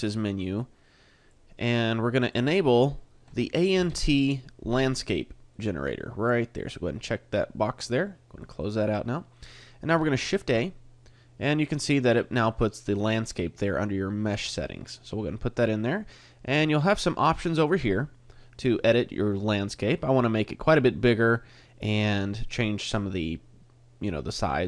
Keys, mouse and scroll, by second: 10.2 shift+a, 17.0 click.